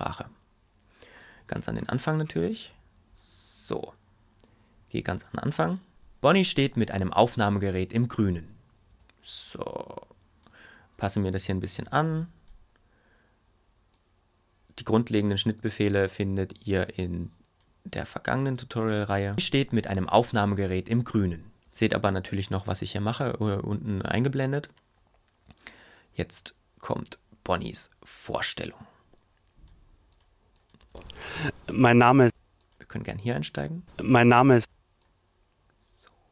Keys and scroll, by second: 6.0 space, 8.9 space, 19.3 space, 21.7 space, 30.8 space, 32.2 space, 33.8 space.